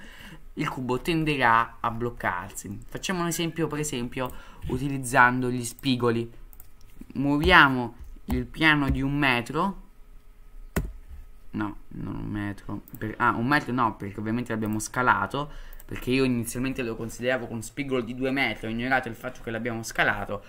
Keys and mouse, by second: 2.7-3.0 middle drag, 4.3-6.3 drag, 6.5 click, 7.4 g, 14.7-20.4 drag.